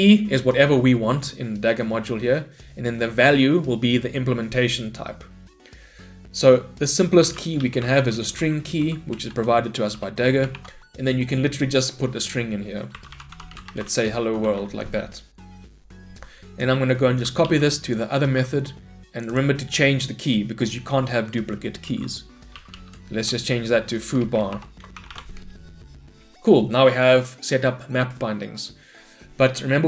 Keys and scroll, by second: 9.2 Return, 17.5 ctrl+c, 18.3 ctrl+v.